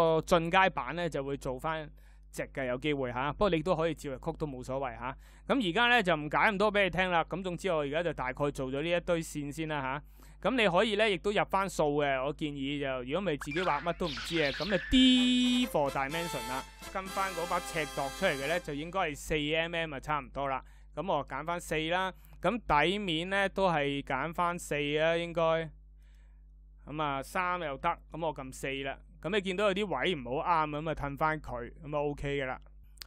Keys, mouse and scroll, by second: 14.8 d.